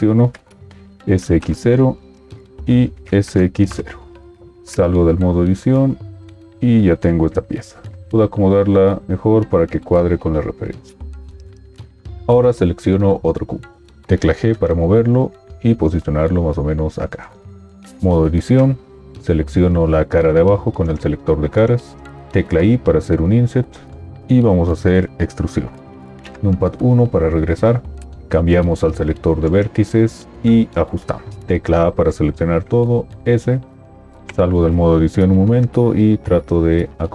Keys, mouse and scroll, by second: 1.0 typing, 2.9 typing, 4.5 Tab, 14.0 g, 18.1 Tab, 22.6 i, 26.4 KP_1, 31.4 a, 33.2 s, 34.6 Tab.